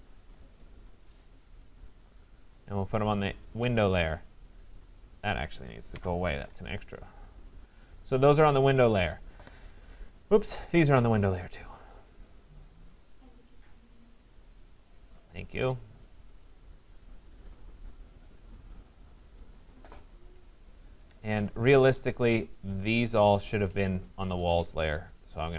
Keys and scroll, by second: 3.8 Escape, 7.6 Delete, 20.9 Escape.